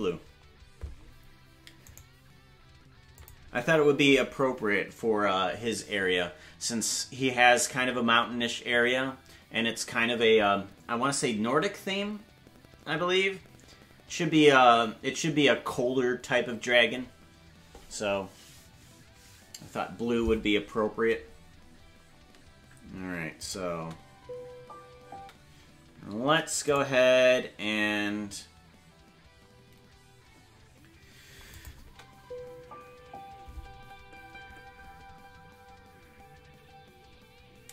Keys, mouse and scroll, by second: 3.1 click, 3.1 right click, 3.4 space, 23.4 click, 23.7 space, 26.2 ctrl+Tab, 26.2 space, 26.7 right click, 31.5 click, 31.8 space.